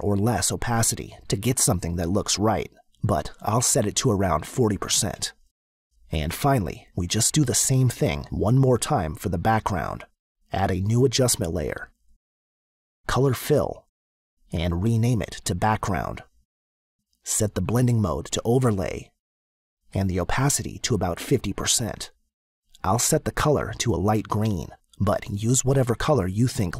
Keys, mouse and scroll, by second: 3.0 click, 6.4 click, 11.8 click, 13.4 click, 15.1-16.4 typing, 18.1 click, 19.4 click, 20.3 click, 22.2 click, 22.7 click, 23.6 click, 24.1 click, 24.7 click.